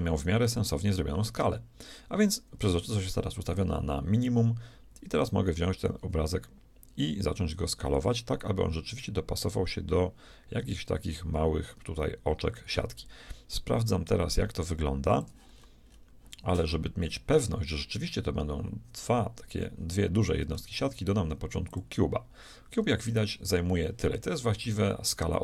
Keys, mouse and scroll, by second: 3.2-6.4 drag, 15.6-20.7 middle drag, 20.7 shift+a, 22.7-25.4 middle drag.